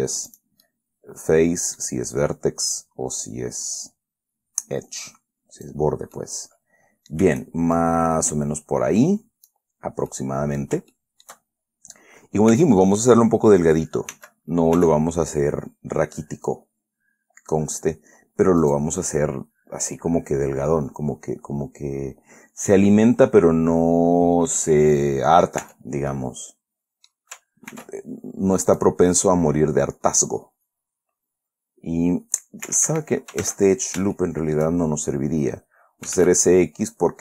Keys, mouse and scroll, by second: 0.6 click, 1.0 click, 3.1-6.2 drag, 6.5-7.6 middle drag, 8.1-10.0 shift+drag, 10.4 middle click, 11.3 shift+middle click, 12.0-12.3 shift+scroll up 1, 12.9 Tab, 14.5 s, 15.1 x, 19.0 click, 20.3-25.1 middle drag, 26.0 Tab, 26.4 scroll down 1, 26.5-27.6 middle drag, 28.1 ctrl+r, 29.0 click, 33.0 Escape, 33.8 ctrl+z, 34.5 shift+click, 36.2-37.0 typing.